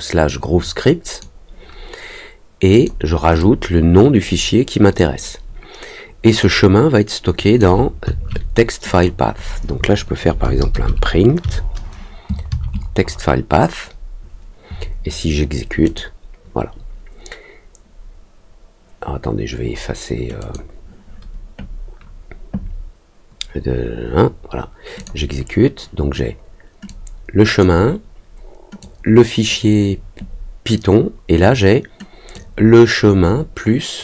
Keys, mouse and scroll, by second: 2.7 click, 3.3-4.9 drag, 6.3-7.5 drag, 8.8 click, 15.8 click, 20.3 click, 24.9 click, 26.8 click, 28.7 click, 32.3-34.0 drag.